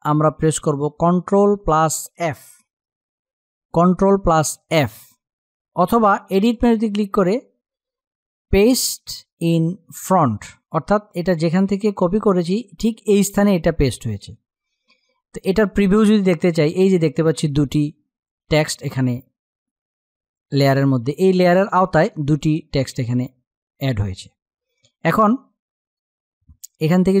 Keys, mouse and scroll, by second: 2.7 click, 4.3 ctrl+f, 6.1 click, 10.9 click, 15.6 click, 19.9 click.